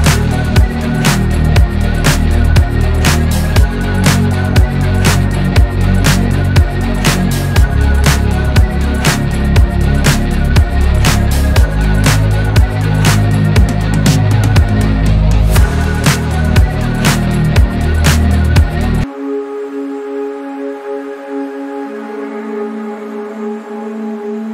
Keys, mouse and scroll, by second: 0.2 Tab, 0.3 middle click, 0.5-0.9 scroll up 1, 0.9 middle click, 1.5-2.0 scroll down 2, 1.6 middle click, 2.0 middle click, 2.3-2.9 scroll up 1, 2.9 click, 3.3 middle click, 4.2 ctrl+click, 4.5-6.0 middle drag, 6.0 ctrl+click, 6.8-8.2 drag, 8.2 Tab, 8.9 scroll down 2, 9.1-10.6 middle drag, 10.6 click, 11.5 /, 12.2 scroll down 1, 12.3-12.7 middle drag, 12.7 click, 12.9 scroll down 1, 13.0-14.0 middle drag, 14.0-14.4 scroll up 1, 14.4-15.2 scroll down 2, 15.2-17.0 middle drag, 17.0 click, 18.2 scroll down 1, 18.3-22.0 shift+middle drag.